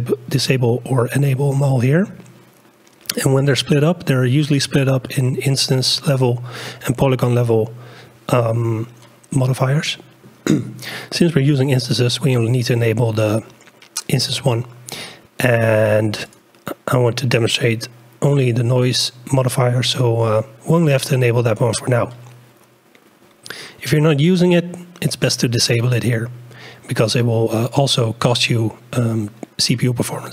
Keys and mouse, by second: 9.4-10.4 drag, 14.9-16.4 drag.